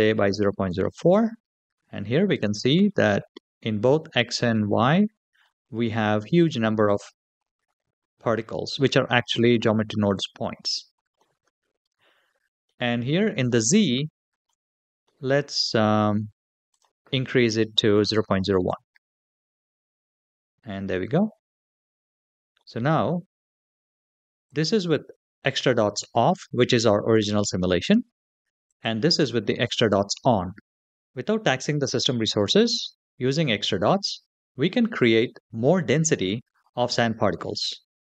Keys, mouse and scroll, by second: 3.2-5.2 middle drag, 11.0-12.4 middle drag, 13.3-14.2 shift+middle drag, 14.8 middle click, 16.5-18.8 drag, 19.8 middle click, 21.1-21.6 scroll down 3, 21.8-22.4 scroll down 2, 22.4-22.7 middle drag, 24.3 click, 28.7 click, 37.8-38.1 scroll down 3.